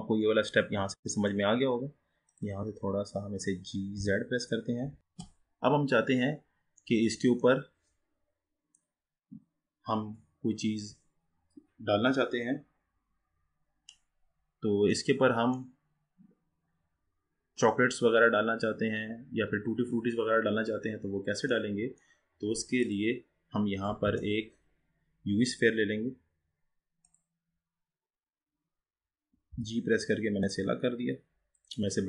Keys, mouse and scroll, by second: 1.7-2.3 scroll up 3, 2.3 click, 4.0 g, 5.0-5.5 scroll up 7, 5.5-6.9 scroll up 6, 6.9-7.9 middle drag, 7.9-10.9 scroll down 4, 15.1-16.1 middle drag, 16.1-16.8 scroll up 2, 18.9-20.9 scroll down 1, 20.9-21.6 scroll down 3, 21.6-22.6 middle drag, 22.6 scroll up 2, 22.9 click, 24.1 shift+a, 28.1-29.7 scroll down 5, 29.7 g.